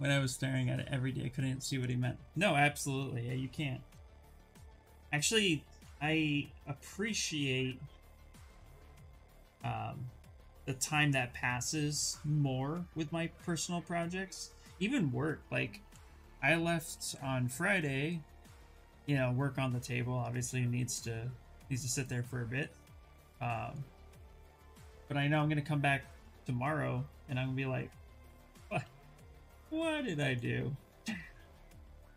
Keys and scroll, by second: 3.6 b, 8.2 s, 11.1 s, 15.8 ctrl+z, 16.0 ctrl+z.